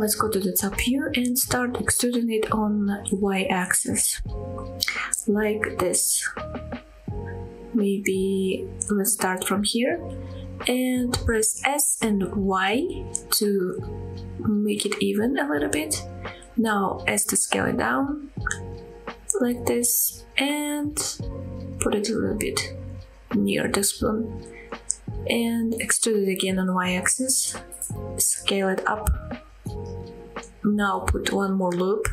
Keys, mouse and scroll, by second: 0.1 KP_7, 0.6 scroll up 1, 1.0-1.4 scroll down 1, 1.5 shift+middle click, 3.0 e, 3.8 z, 5.4 y, 9.4 click, 10.6 s, 11.1 y, 12.7-14.4 scroll up 6, 15.0 click, 15.5 scroll up 1, 16.3 s, 19.9 click, 20.4 g, 20.9 y, 22.1 click, 22.5-23.1 scroll down 3, 23.3 shift+middle click, 23.9-24.4 scroll up 1, 24.4 e, 25.9 y, 28.6 click, 29.1 s, 31.0 click, 32.0 ctrl+r.